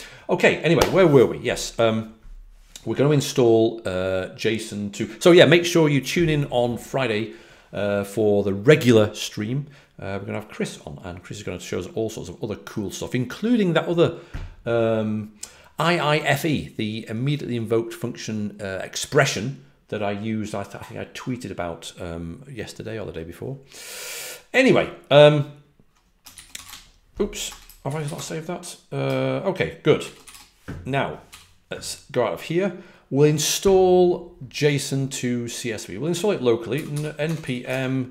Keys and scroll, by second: 26.6-28.1 typing, 30.2 q, 31.2 typing, 36.4-38.1 typing.